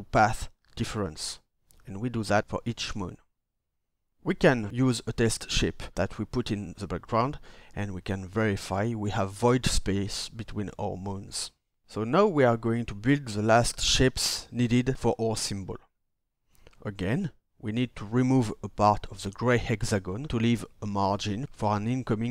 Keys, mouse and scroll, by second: 0.4-1.4 shift+drag, 17.4 ctrl+d.